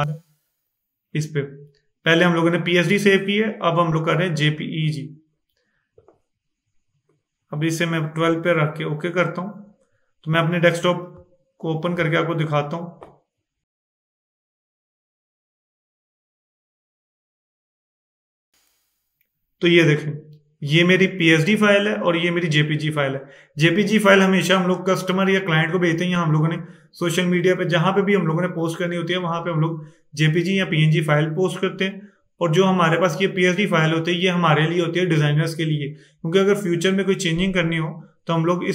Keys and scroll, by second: 12.0 super+e.